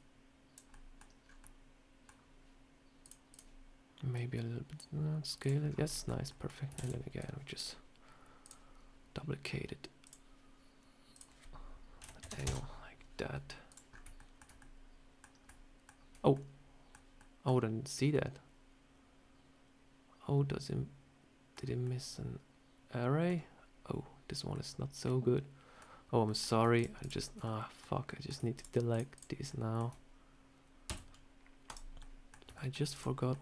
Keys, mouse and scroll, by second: 0.6 middle click, 1.1 scroll up 3, 1.3 middle click, 2.9 click, 3.2 click, 4.0 click, 5.3 click, 5.5 scroll down 3, 5.7 middle click, 6.1 middle click, 6.4 scroll down 1, 6.6 shift+d, 7.1 click, 8.3 click, 9.9 click, 11.0 click, 13.5 click, 13.8 scroll up 3, 14.0 shift+middle click, 14.5 middle click, 15.3 shift+middle click, 16.1 scroll up 1, 16.2 middle click, 17.0 middle click, 17.3 shift+middle click, 17.3 scroll down 1, 18.0 middle click, 21.7 middle click, 24.4 middle click, 26.1 middle click, 26.6 shift+click, 27.3 middle click, 27.3 shift+click, 27.9 middle click, 28.4 shift+click, 28.8 shift+click, 29.3 shift+click, 29.3 shift+middle click, 29.5 shift+middle click, 30.7 x, 31.9 middle click, 32.4 middle click, 32.8 click, 33.2 middle click.